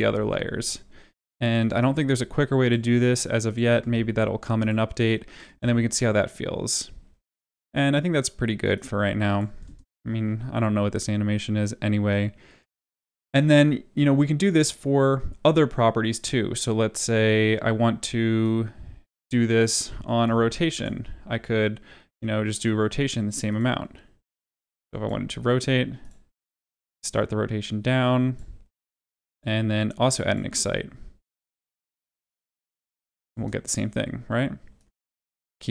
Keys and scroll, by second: 0.0 ctrl+v, 5.4 space, 9.6 space, 20.0 r, 33.3 space.